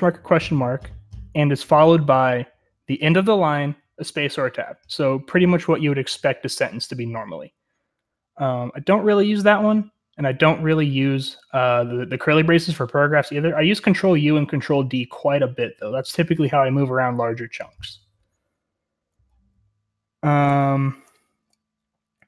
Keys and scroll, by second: 18.1-19.2 typing, 20.3-22.2 typing.